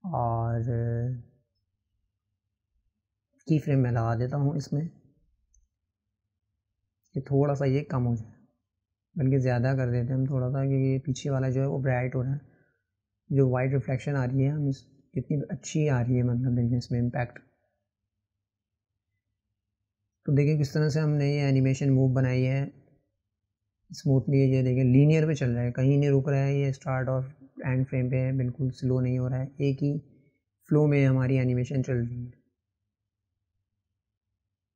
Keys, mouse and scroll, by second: 2.6 click, 6.4 click, 10.2-17.1 drag, 20.4 click, 22.5 click, 25.7-34.7 drag.